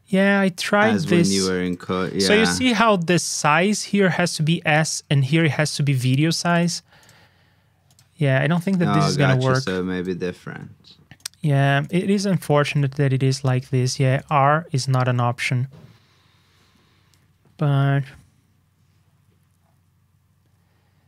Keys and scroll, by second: 0.9 super+c, 2.1 super+v, 11.5 super+c, 12.2 super+v, 15.1 super+Tab.